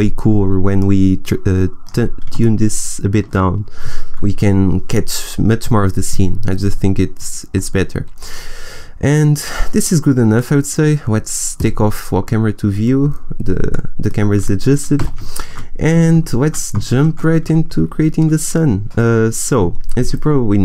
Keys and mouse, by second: 0.7-2.9 drag, 11.5 click, 12.3-13.6 middle drag, 14.9 a, 17.0 shift+a.